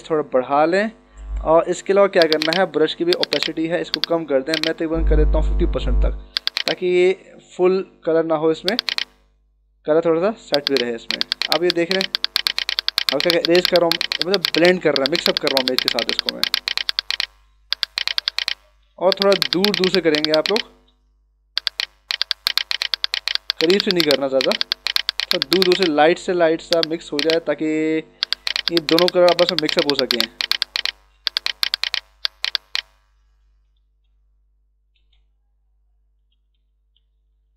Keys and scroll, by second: 5.3 5, 5.7 Return, 8.1 d, 9.0 space, 33.9 ctrl+alt+z, 36.9 [.